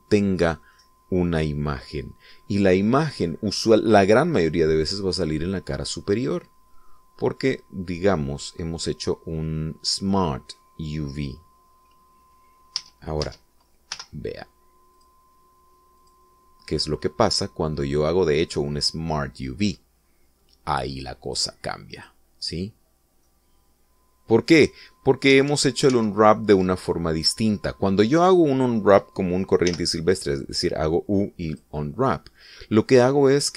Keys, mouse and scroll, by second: 1.9-4.0 middle drag, 4.3-5.5 middle drag, 5.9-7.0 middle drag, 7.1-8.8 middle drag, 13.9 Tab, 15.1 u, 16.1 click, 17.1 click, 22.4 click, 23.1 click, 24.1 scroll down 1, 24.5-26.2 middle drag, 26.7 ctrl+z, 30.9 u, 32.7 click.